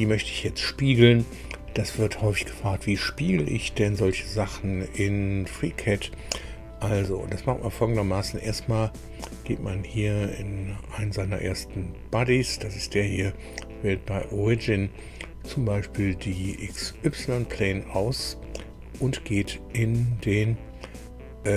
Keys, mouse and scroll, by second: 8.3-8.6 scroll up 2, 8.9 scroll up 2, 10.2-10.5 scroll down 2, 13.0 click, 14.1 click, 16.8 click, 20.0 click.